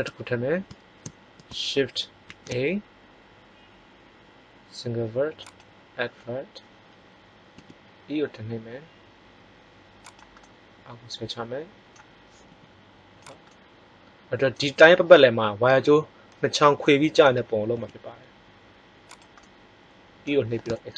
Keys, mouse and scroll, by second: 2.2 shift+a, 7.4 e, 10.4 middle click, 12.4 g, 13.2-14.9 middle drag, 17.6 e.